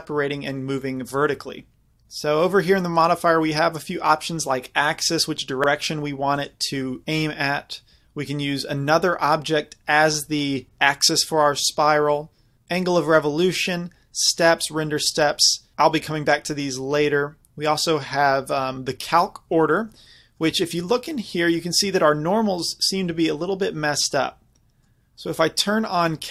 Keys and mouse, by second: 5.0-10.7 drag, 21.4-24.5 middle drag, 24.6 middle click.